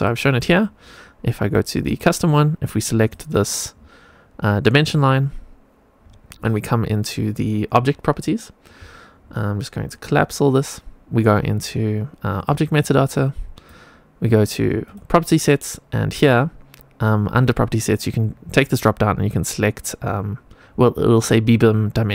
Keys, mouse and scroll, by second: 1.8 click, 2.9 click, 3.6-5.9 scroll up 2, 5.9-8.1 scroll up 1, 8.1 scroll up 3, 8.7-9.8 scroll up 4, 9.8 click, 12.3 click, 13.0 click, 14.7 click, 17.7-22.1 drag.